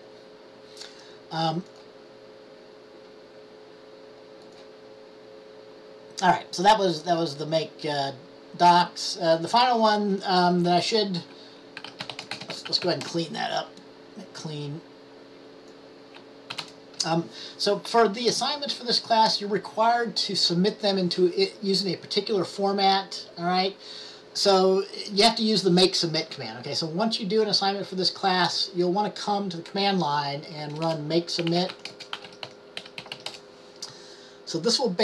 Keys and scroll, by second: 11.7-13.5 typing, 31.6-33.8 typing.